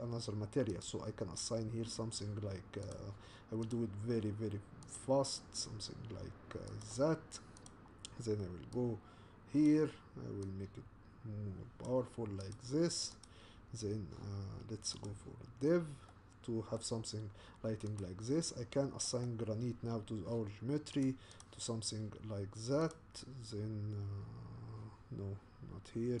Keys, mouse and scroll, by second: 0.8 click, 3.7 click, 6.8-8.7 drag, 10.5-12.5 drag, 13.2 click, 15.1 click, 16.1 middle click, 16.8-18.0 scroll up 3, 18.0 click, 18.6-19.0 scroll down 1, 19.0-21.5 middle drag, 21.5-26.2 drag.